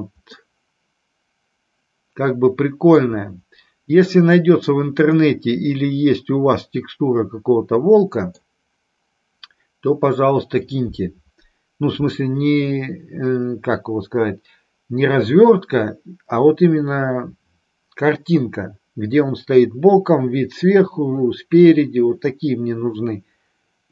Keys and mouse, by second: 0.4-2.9 middle drag, 5.1-8.2 middle drag.